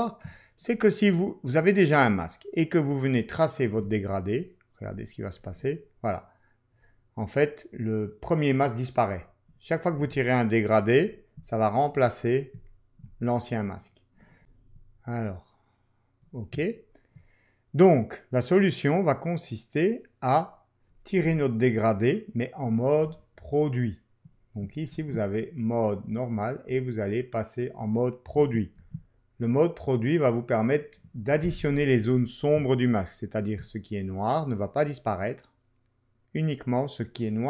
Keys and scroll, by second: 24.9 ctrl+q.